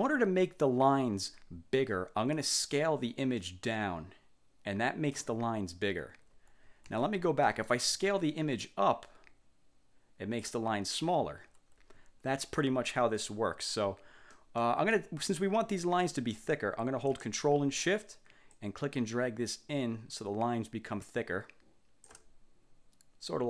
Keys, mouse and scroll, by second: 3.5-5.5 ctrl+shift+drag, 7.0 ctrl+z, 7.6 ctrl+click, 8.7-10.8 ctrl+shift+drag, 12.4 ctrl+z, 14.5 middle click, 18.7-22.4 ctrl+shift+drag.